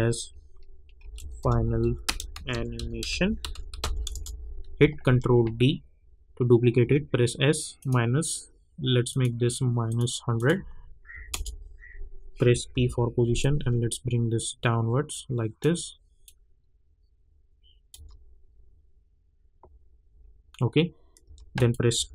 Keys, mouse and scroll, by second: 0.8-4.3 typing, 5.0 ctrl+d, 6.8 s, 7.8 click, 11.1 -, 11.3 Return, 12.7 p, 13.4-17.9 drag, 17.9 space, 21.2 space, 21.5 click, 21.9 t.